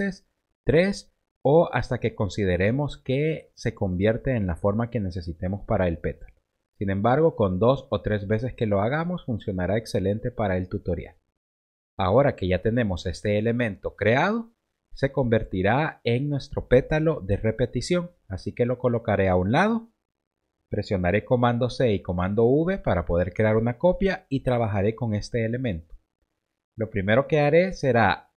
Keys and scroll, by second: 0.5 shift+Up, 6.7 shift+Down, 7.8 shift+Up, 11.4 v, 21.2 super+c, 22.0 super+v.